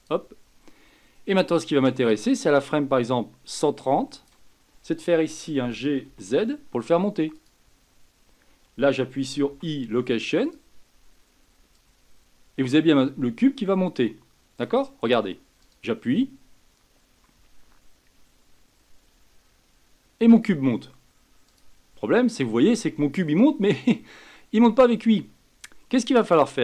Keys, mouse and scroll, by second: 2.6-5.6 drag, 5.6 g, 11.7-14.7 drag, 15.6 click, 21.5 click, 26.2-26.6 drag.